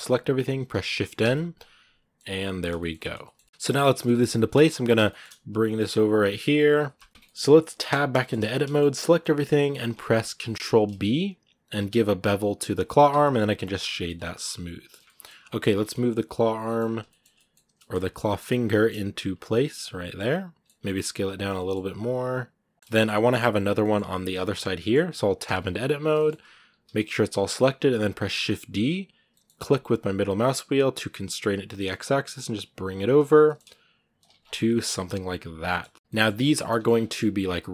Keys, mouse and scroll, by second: 1.1 middle click, 2.1 scroll down 1, 2.2 middle click, 2.8 scroll up 2, 3.0 shift+middle click, 3.4 KP_1, 3.9-4.4 scroll up 4, 4.1 shift+middle click, 4.8 scroll down 1, 4.9 shift+middle click, 5.3 g, 6.5 scroll down 2, 6.8 shift+middle click, 7.7 Tab, 8.0 shift+middle click, 8.1 scroll up 1, 8.5-9.7 shift+middle drag, 9.7-10.3 scroll up 1, 10.3 ctrl+b, 13.7 scroll down 3, 13.8 middle click, 14.7 scroll up 1, 14.8 middle click, 15.6 g, 16.4 middle click, 16.6 scroll up 2, 16.9-17.9 shift+middle drag, 17.9 g, 19.4-20.6 middle drag, 20.6 s, 22.7 scroll down 1, 22.7 shift+middle click, 23.5 scroll down 1, 23.6-24.7 middle drag, 24.7 scroll up 2, 25.2 Tab, 25.9 shift+middle click, 26.1-26.5 scroll up 1, 26.5 a, 27.1-27.6 scroll down 1, 27.6 shift+d, 32.9 scroll up 1, 33.2 g, 34.2 scroll down 3, 34.3 middle click, 34.8 middle click, 35.7-36.3 scroll down 2, 35.8 middle click, 36.3 middle click, 36.6 scroll up 1, 36.8 scroll down 2, 36.9 middle click, 37.2 r.